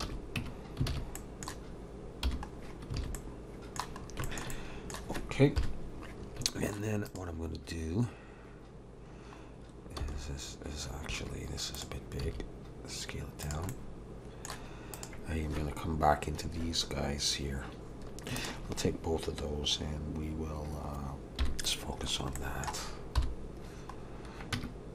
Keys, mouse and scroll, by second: 0.0 alt+a, 0.4 Tab, 0.9 alt+a, 1.2 middle click, 2.2 /, 2.6-2.9 scroll down 2, 2.9 alt+a, 3.2 middle click, 4.0 scroll up 2, 4.2 shift+middle click, 4.5 middle click, 5.6 KP_7, 6.2 scroll up 2, 6.5 shift+middle click, 7.0 click, 8.9-9.2 scroll down 1, 10.0 s, 11.7 click, 12.2 s, 13.7 middle click, 14.9 click, 18.4 shift+click, 21.4 /, 22.3 middle click, 23.2 End, 23.2 KP_7, 24.0-24.4 scroll up 1, 24.5 Tab, 24.5 scroll up 2.